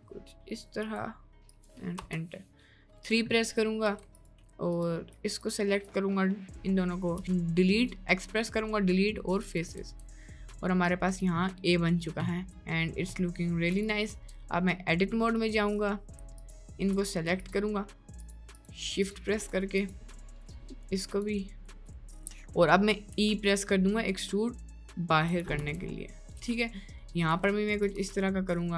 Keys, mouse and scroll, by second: 3.5 middle click, 3.9 3, 4.1 click, 7.2 x, 9.9 Tab, 10.3 middle click, 11.0 drag, 11.7 middle click, 12.5-13.2 middle drag, 13.6 middle click, 14.2 Tab, 14.6 middle click, 14.9 right click, 15.4 1, 16.4 click, 18.2 click, 18.6 shift+click, 19.0 shift+click, 20.5 middle click, 22.2 shift+click, 22.6 middle click, 23.1 e, 25.6 Tab, 26.0 middle drag, 26.7 shift+middle click, 27.6 middle drag, 28.1 Tab, 28.6 click.